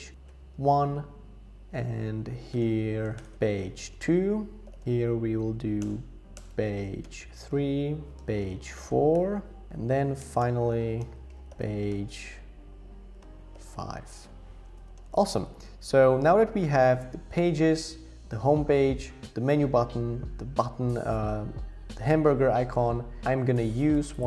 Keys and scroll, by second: 0.0-1.2 typing, 1.7 Tab, 3.2 shift+Tab, 3.3 shift+Tab, 5.4 shift+2, 5.8 Return, 6.4 Return, 8.1-10.2 typing, 10.4 shift+Tab, 13.2 space, 13.5 5, 14.2 Escape, 14.8 Return, 15.1 shift+1.